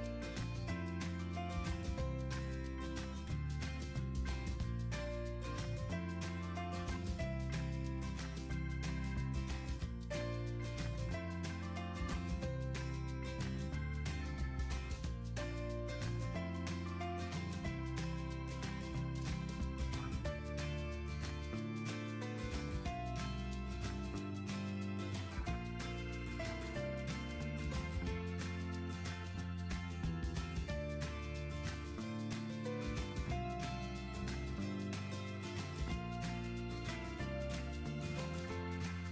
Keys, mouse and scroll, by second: 35.5-35.8 typing, 36.4 Return.